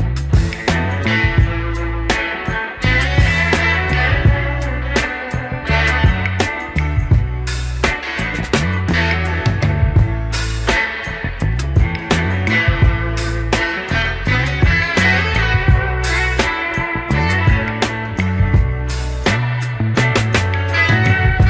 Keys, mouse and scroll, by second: 0.2 Tab, 0.8 ctrl+a, 1.6 Tab, 2.9 ctrl+b, 12.1 middle click, 13.2 ctrl+z, 13.4 ctrl+z, 14.2 ctrl+z, 14.4 ctrl+z, 15.5 Tab, 16.3 Delete, 16.8 shift+a, 20.1 scroll down 2, 20.8 scroll down 1, 21.2 r.